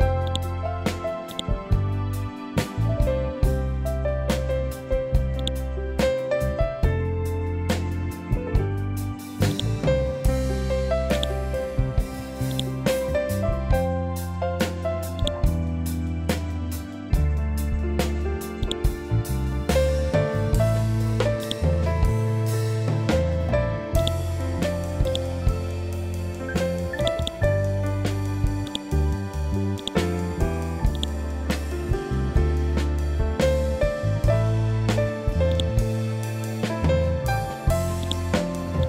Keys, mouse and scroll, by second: 5.3-9.4 drag, 9.4-12.4 drag, 15.7 scroll down 1, 18.5-19.9 drag, 19.9 scroll up 1, 21.3-32.0 drag, 32.0-32.4 scroll up 1, 35.4-37.9 drag, 37.9 right click, 38.7-38.8 drag.